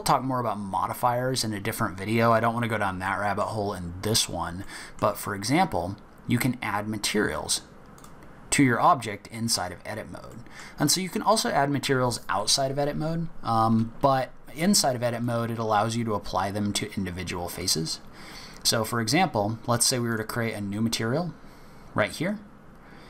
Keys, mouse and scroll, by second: 3.0 middle click, 3.6-4.6 scroll up 1, 4.6 middle click, 7.9 click, 10.3 middle click, 10.8 scroll down 1, 15.2 shift+click, 17.6 click, 20.1 click, 22.2-22.9 scroll up 1, 22.9 scroll up 1.